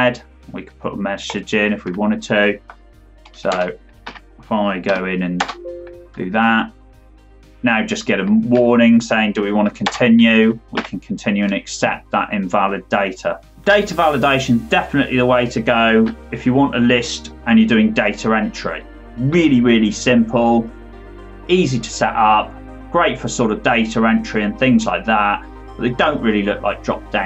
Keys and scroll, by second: 3.4 Return, 4.0 Up, 4.8 F2, 5.3 Return, 8.5 Left, 9.8 Return, 10.7 Up.